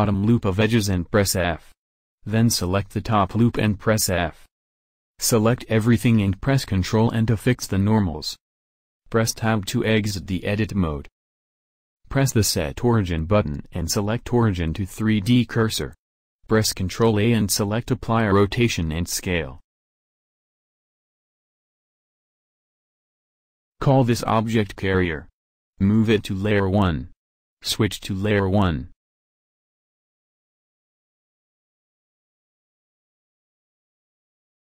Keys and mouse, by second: 1.0 f, 1.3 a, 2.9 f, 3.2 a, 3.6 a, 4.4 ctrl+n, 4.4 ctrl+space, 5.5 Tab, 17.7 ctrl+a, 20.6-22.4 drag, 24.5 r, 25.2 r, 27.8 m, 32.3-33.5 middle drag, 33.7-34.7 middle drag.